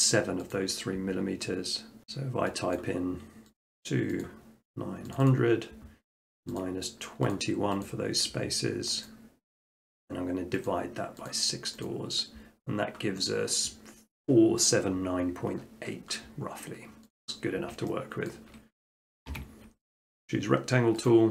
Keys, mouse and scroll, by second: 0.5-1.6 drag, 2.0 click, 2.8-6.4 drag, 6.6-8.9 drag, 9.1-10.2 drag, 10.7 click, 11.3 click, 11.9 click, 17.1 click, 18.3 shift+middle click, 18.6 middle click, 18.9 middle click, 19.2 shift+middle click, 21.1 click.